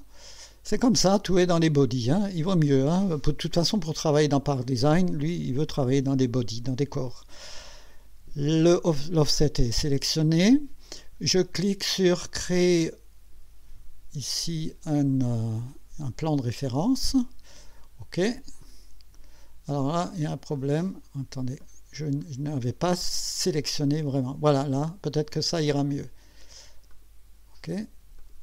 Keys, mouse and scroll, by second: 0.4 click, 16.3 click, 18.6 click, 20.1 click, 20.6 click, 21.6 click, 22.2 click, 23.9 click, 26.9 click, 28.2 click.